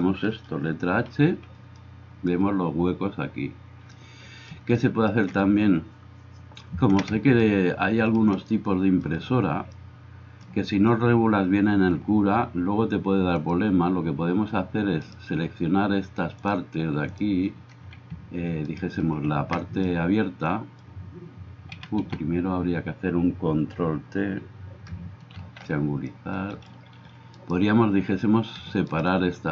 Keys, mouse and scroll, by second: 1.3 h, 15.1-29.5 drag, 15.1-19.3 right drag, 21.8 a, 22.1 a, 25.4 ctrl+t, 27.4-28.5 middle drag, 27.4-28.5 right drag.